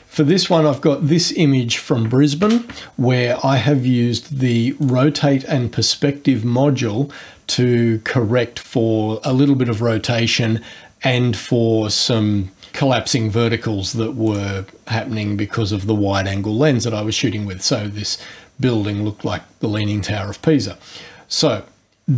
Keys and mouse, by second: 4.8 click, 12.6 click, 14.3 click, 21.4 click.